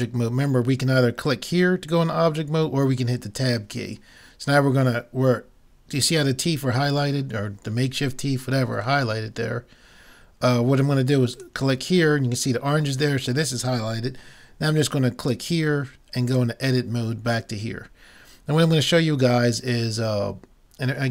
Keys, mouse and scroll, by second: 9.1 middle click, 9.5 middle click, 11.4 click, 11.6 right click, 12.5 click, 13.0 middle click, 16.4 click, 17.5 middle click, 18.2 middle click, 18.4 middle click, 18.6 middle click, 18.7 middle click.